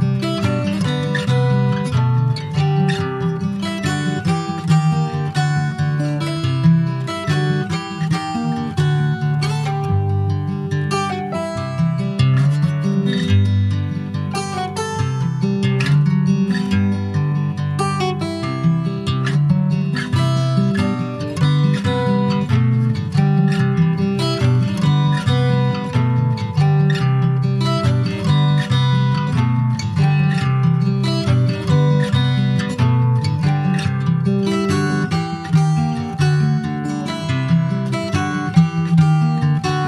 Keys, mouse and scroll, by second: 1.3 ctrl+s, 1.4 click, 1.8 middle click, 2.3 ctrl+s, 2.4 click, 2.8 ctrl+s, 2.9 click, 3.2 middle click, 3.7 ctrl+s, 3.8 click, 4.1-6.6 middle drag, 7.9 click, 8.5 Tab, 9.0 shift+middle click, 9.8 2, 10.2 click, 10.6-12.5 middle drag, 12.5 shift+click, 13.0 middle click, 13.4 scroll up 1, 14.2 click, 16.1 ctrl+z, 16.3 middle click, 16.7 Tab, 16.9 click, 17.2-17.5 scroll down 3, 17.5 shift+middle click, 18.4 ctrl+s, 18.6 middle click, 19.4 ctrl+s, 20.1 shift+middle click, 20.5 ctrl+s, 21.5 middle click, 22.5 a, 23.1 ctrl+a, 24.2 ctrl+s, 24.6 middle click, 26.1 h, 26.4 click, 26.8 middle click, 27.3 ctrl+s, 27.8 click, 28.1 click, 28.6 shift+a, 30.4 click, 31.4 shift+a, 35.3 middle click, 35.6-36.4 scroll up 5, 35.9 shift+middle click, 36.9 shift+middle click, 37.4-37.9 shift+scroll up 5, 37.9 shift+middle click, 38.3-38.9 shift+scroll up 8, 39.0 shift+middle click, 39.4-39.8 shift+scroll up 3.